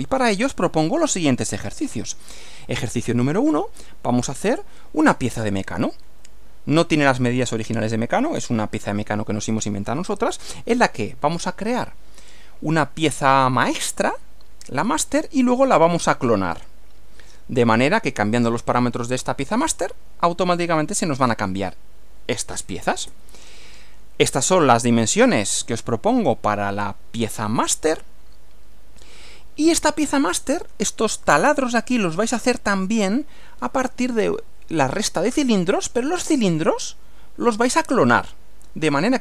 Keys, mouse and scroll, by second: 1.6 click, 23.1 Right.